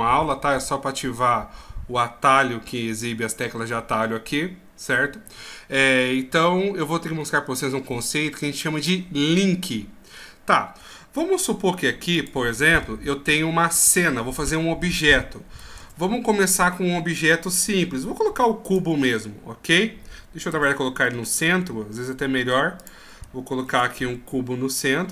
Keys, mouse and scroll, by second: 5.2 n, 6.8-8.4 scroll up 2, 8.4 scroll up 1, 11.4 x, 13.6-14.6 scroll down 3, 15.8 shift+a, 20.5 ctrl+z, 21.3 shift+s, 23.6 shift+a.